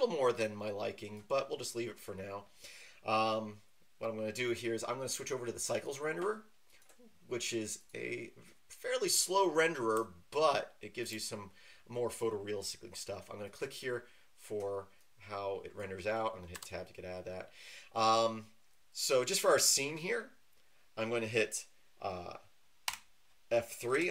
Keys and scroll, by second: 16.5 Tab, 22.8 F3.